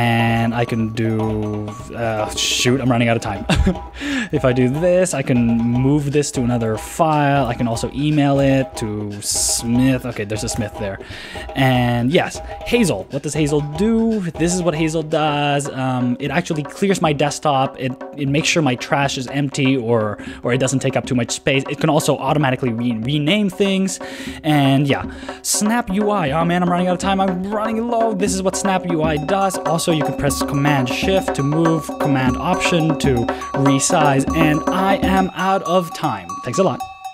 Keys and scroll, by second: 0.4 super+space, 7.4 alt+BackSpace, 8.4 Return, 10.5 super+space, 13.0 super+space, 13.2 shift+,, 22.7 super+w, 25.9 super+n, 26.8 alt+super+Left, 27.7 super+n, 28.3 alt+super+Right, 33.6 super+w.